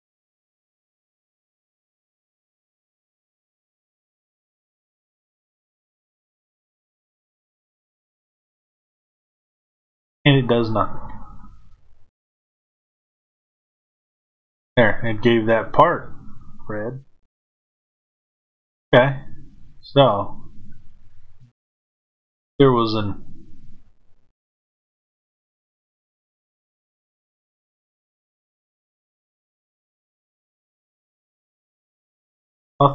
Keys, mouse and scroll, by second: 6.0 click, 8.4 click, 12.4 click, 18.9-22.9 middle drag, 22.9-25.3 drag.